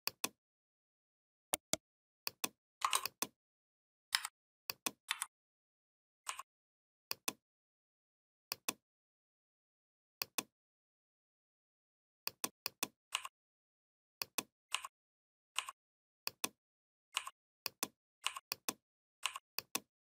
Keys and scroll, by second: 4.0 a, 4.9 v.